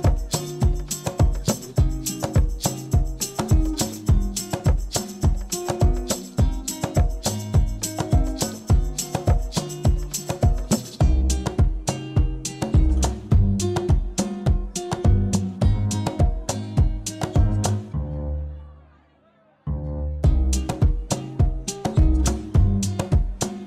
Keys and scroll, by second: 3.4 space, 10.7 u, 13.0 F9, 14.0 ctrl+c, 15.5 ctrl+v, 16.2 u, 21.4 shift+space.